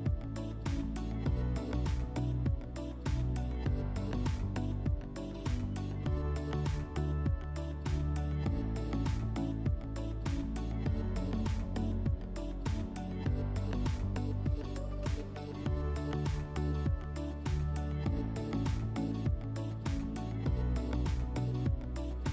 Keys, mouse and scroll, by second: 7.6 click, 8.7 click, 10.7 click, 12.6-14.2 drag, 17.0 click, 21.9-22.3 drag.